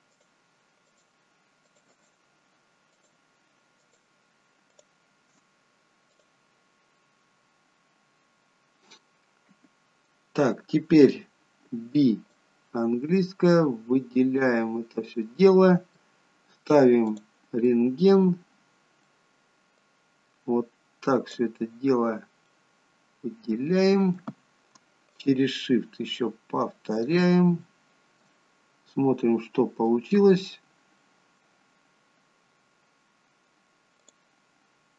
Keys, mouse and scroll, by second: 0.1 scroll up 1, 0.2 alt+shift+click, 6.2 click, 8.1-8.5 scroll down 1, 9.1-11.6 scroll down 4, 11.6 b, 15.4 middle click, 17.2 click, 17.6 middle click, 19.8 click, 22.5 middle click, 25.2 shift+click, 27.7 middle click, 28.5-29.5 scroll up 5, 28.9 middle click, 30.2-30.8 scroll down 2, 30.8 scroll up 1, 31.0 middle click, 31.6-33.2 scroll down 2, 34.1 click.